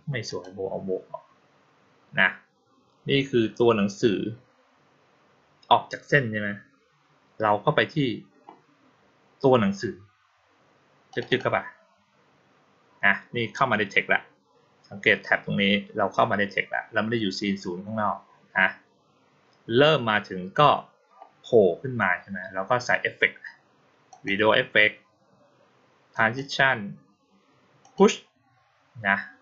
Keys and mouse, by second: 0.1 click, 11.0 click, 11.1 click, 24.0 click, 26.0 click, 27.7 click.